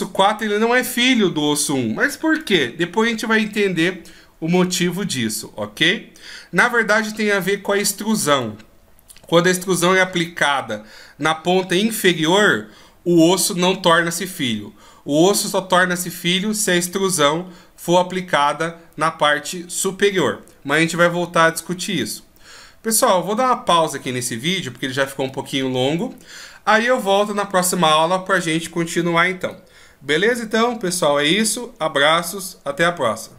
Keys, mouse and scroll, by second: 2.3 click.